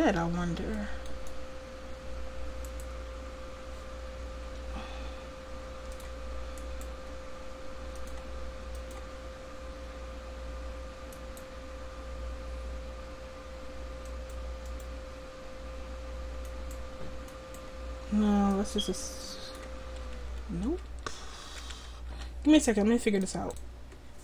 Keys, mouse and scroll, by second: 4.5 r, 7.9 click, 8.4-11.2 drag, 11.2-13.0 right drag, 13.0-14.1 middle drag, 14.1-16.6 drag, 16.6-18.6 middle drag, 20.4 ctrl+z, 21.2 ctrl+z, 21.7 ctrl+z, 21.8 a, 22.1 a.